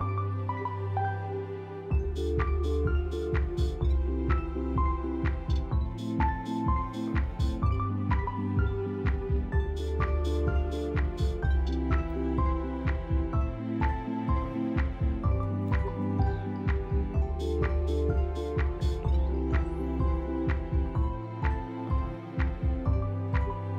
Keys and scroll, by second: 4.1 alt+x, 7.4 z, 9.3 Delete, 10.0 ctrl+z, 10.6 Delete, 15.4 z, 22.2 z.